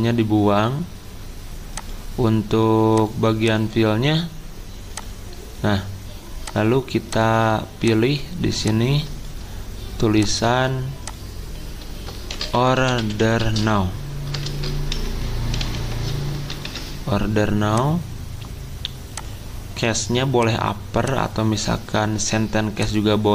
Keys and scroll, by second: 12.1-16.1 typing, 16.6 ctrl+a.